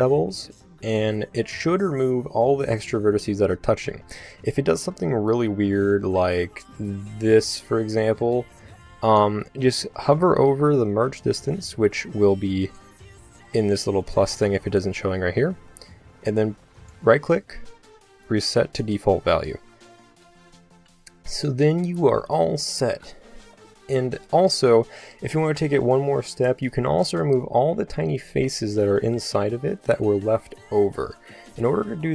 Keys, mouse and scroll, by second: 6.2 click, 12.3-14.3 drag, 16.5 right click, 18.8-20.2 drag, 20.2 a, 26.1 z, 30.6 a, 30.9 z.